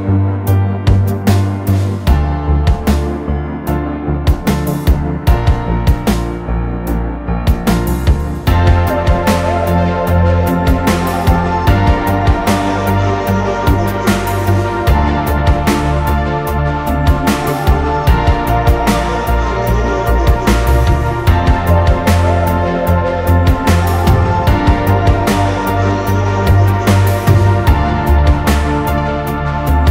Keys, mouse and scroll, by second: 5.8 ctrl+t, 7.0 alt+shift+click, 12.1 alt+shift+click, 17.4 ctrl+t, 23.6 alt+shift+click, 25.9 Up, 26.1 Up, 26.6 Right, 27.0 Right, 27.3 Down, 28.1 Up, 28.3 Up, 28.6 Right, 28.9 Right.